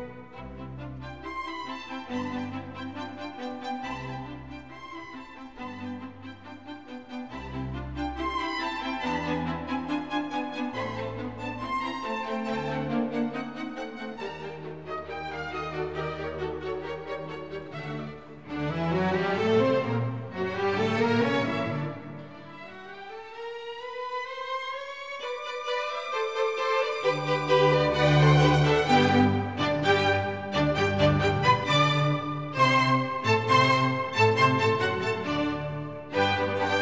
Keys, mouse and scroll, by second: 0.9-2.3 drag, 4.0 click, 5.0-6.4 middle drag, 6.4 click, 7.2 middle click, 8.1 click, 10.5 shift+z, 13.7 z, 14.3 n, 16.2 click, 17.1 n, 17.7 right click, 18.2-19.3 drag, 20.0-21.7 drag, 23.3 shift+z.